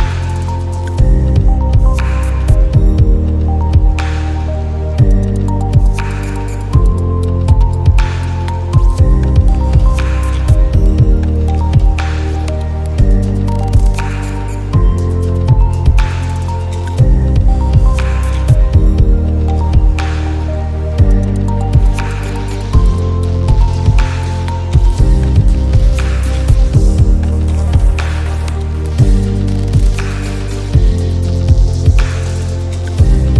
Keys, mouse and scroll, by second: 11.0-20.6 drag, 20.6 ctrl+z, 21.1 click, 24.4-29.4 drag, 29.4 ctrl+z, 30.0 click, 33.1 click.